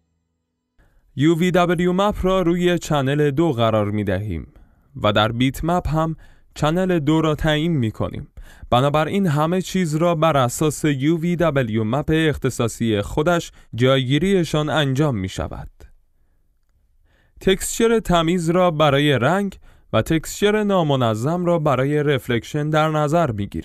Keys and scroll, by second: 20.2 F11.